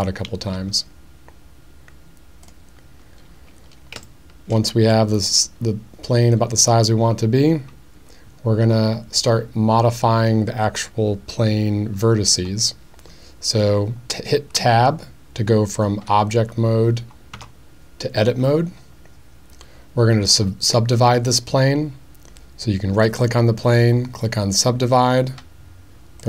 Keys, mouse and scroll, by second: 0.5 s, 2.4 click, 4.1-4.5 shift+middle drag, 4.9 middle click, 17.3 Tab, 23.0-24.7 right drag.